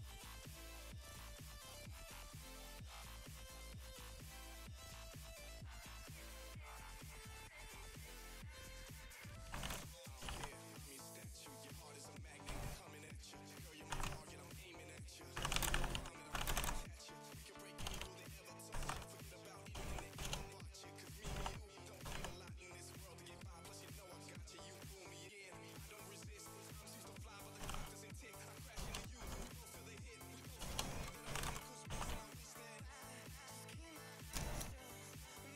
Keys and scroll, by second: 9.7 y, 10.3 d, 10.8 1, 11.9-32.4 typing.